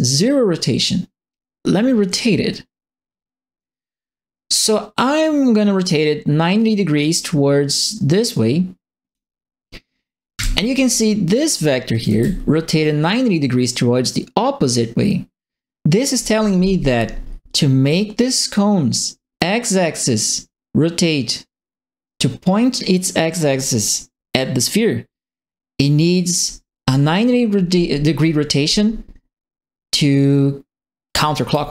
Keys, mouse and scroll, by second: 2.0-9.1 drag, 10.3 w, 11.7-12.5 typing, 11.9 right click, 17.8 click, 30.8-31.7 typing, 31.0-31.7 right drag.